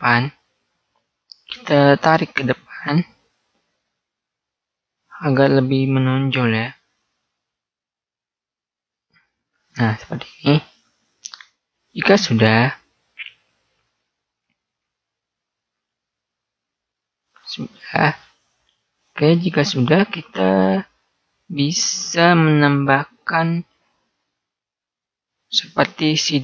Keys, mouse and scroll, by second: 0.3 right click, 2.4 click, 9.2-11.0 middle drag, 19.8-21.1 middle drag.